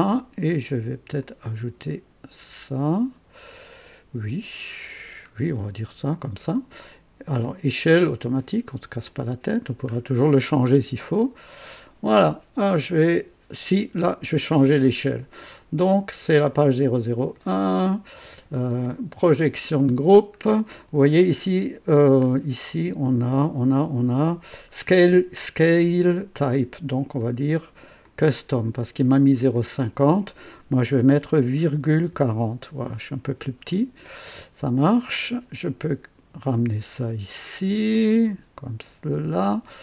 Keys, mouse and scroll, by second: 1.2 click, 4.8-5.2 scroll down 2, 5.5-6.4 right drag, 7.4 click, 8.2 click, 9.0 click, 9.9-10.3 scroll up 2, 10.7 scroll up 2, 11.2-11.9 right drag, 15.0-15.4 scroll down 2, 15.7 scroll down 2, 17.1 click, 17.5 scroll down 2, 18.8 click, 19.3 click, 22.2-22.5 scroll up 2, 24.3 scroll down 2, 26.8 click, 28.0 click, 29.5 click, 31.6 ,, 31.9 KP_4, 32.2 KP_0, 35.6-39.6 drag.